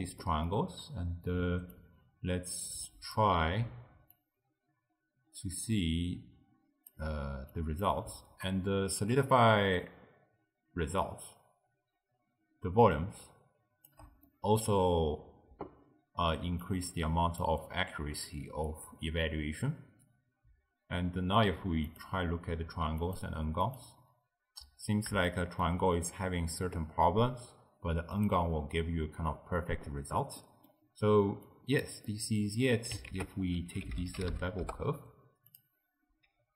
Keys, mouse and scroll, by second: 0.3 middle click, 0.6-1.8 scroll up 1, 1.8-7.2 shift+drag, 7.6 click, 8.5-11.5 shift+drag, 14.3-16.5 middle drag, 16.5 d, 16.7 click, 17.5 d, 18.7 d, 18.8 d, 19.3 d, 22.0 click, 23.1 click, 23.8 click, 25.3-28.2 shift+middle drag, 28.2 click, 30.4 middle click, 30.9-31.5 scroll down 1, 31.5 click, 32.1-33.1 middle drag, 33.1 ctrl+a.